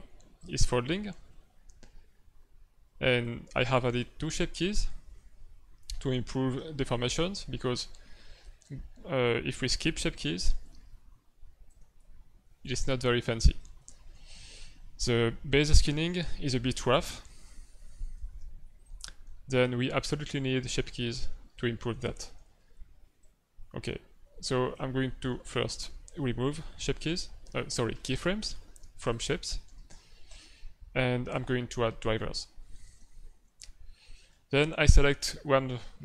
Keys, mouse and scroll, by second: 0.3 click, 7.1 click, 11.6 click, 12.4 shift+middle click, 12.7 middle click, 13.4 ctrl+alt+w, 13.7 ctrl+middle click, 14.2 middle click, 15.4 click, 21.5 click, 22.1 Right, 22.3 Right, 22.6 Right, 23.2 click, 25.0 middle click, 25.4 ctrl+middle click, 27.0 right click, 29.6 right click, 31.3 right click, 32.9 ctrl+Tab, 33.4 middle click, 34.1 right click, 34.7 middle click.